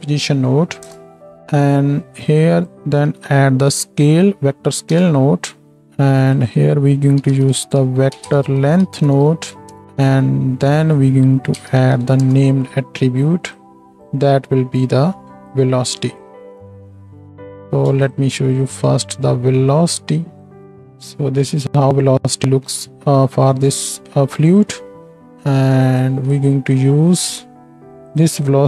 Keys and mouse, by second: 2.3-5.8 drag, 2.3-5.8 middle drag, 6.3-10.0 drag, 6.3-10.0 middle drag, 10.7-13.6 drag, 10.7-13.6 middle drag, 16.2-18.1 drag, 16.2-17.9 middle drag, 18.5 ctrl+shift+drag, 20.6 shift+Left, 20.6 space, 25.0 space, 25.9-28.0 right drag, 26.1 x.